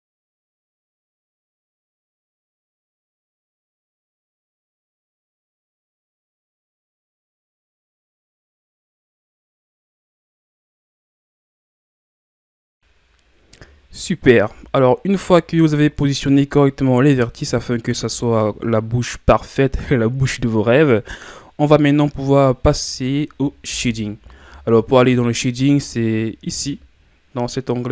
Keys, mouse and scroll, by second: 0.3 Tab, 0.5 scroll down 4, 0.7 middle click, 0.8 scroll up 3, 0.9 middle click, 1.1 Tab, 1.4 middle click, 1.6 KP_1, 1.8 Tab, 1.9-2.4 scroll down 1, 2.4 scroll up 3, 2.7 Tab, 2.8 ctrl+scroll down 2, 3.1 right click, 4.0 Tab, 4.2-4.7 scroll down 4, 4.7 scroll up 2, 4.9 Tab, 5.1 right click, 5.8 ctrl+scroll up 2, 6.1 right click, 6.6 right click, 6.8 Tab, 6.9-7.5 scroll down 7, 7.5 scroll up 1, 7.7 Tab, 7.7 middle click, 8.0 right click, 8.2 click, 8.8 click, 9.0 middle click, 9.3 KP_1, 9.5 Tab, 9.6 scroll down 4, 9.8 scroll up 1, 9.9 Tab, 10.1 Right, 10.7 Right, 11.0 Right, 11.2 Tab, 11.3-11.9 scroll down 10, 11.9-12.4 scroll up 2, 12.5-13.3 shift+scroll up 1, 14.7-16.6 shift+scroll up 3, 16.6-17.6 shift+scroll up 6, 17.6-19.6 shift+scroll down 6.